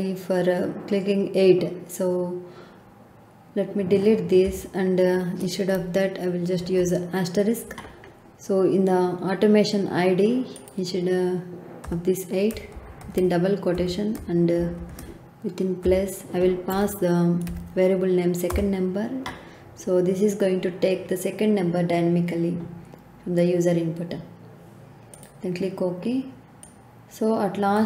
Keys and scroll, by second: 4.4 BackSpace, 6.5 shift+8, 11.8 BackSpace, 12.7 shift+', 13.7 Left, 14.5 shift+=, 15.8 Left, 16.7 s, 17.4 e, 18.4 Return.